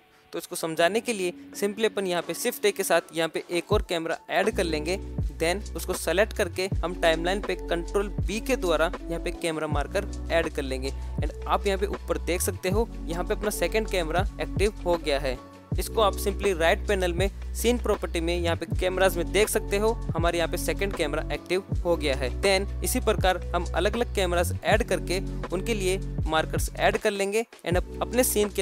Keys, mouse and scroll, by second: 0.0 n, 4.2-6.4 middle drag, 6.4 click, 6.9 click, 8.2 ctrl+b, 13.5 KP_0, 14.6-15.4 scroll down 3, 15.8-18.9 drag, 19.8-22.3 drag, 24.0 ctrl+b, 24.5 g, 25.8 ctrl+b, 26.6 ctrl+alt+KP_0, 27.1 g.